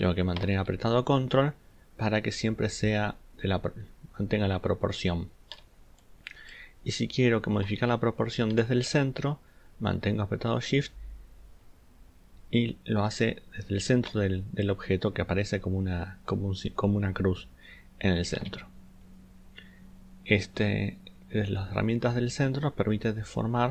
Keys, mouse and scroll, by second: 6.0-6.7 ctrl+drag, 8.6-14.7 ctrl+shift+drag, 16.3-18.5 ctrl+shift+drag.